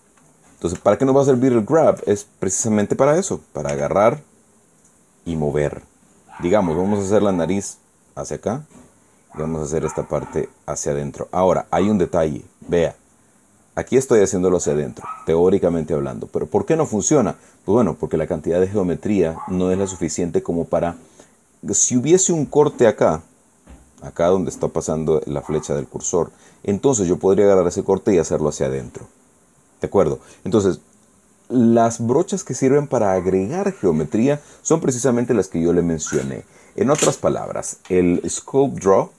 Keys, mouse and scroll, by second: 0.0 KP_3, 1.7-2.8 shift+drag, 4.4 f, 5.4 click, 8.3-9.6 drag, 10.6 click, 11.8 click, 12.8 click, 13.5 click, 14.3 click, 15.1 click, 15.8 click, 16.5 click, 17.1 click, 18.6-22.7 drag, 27.1 click, 32.6-34.1 drag, 34.1 middle click, 34.3 click, 35.0 click.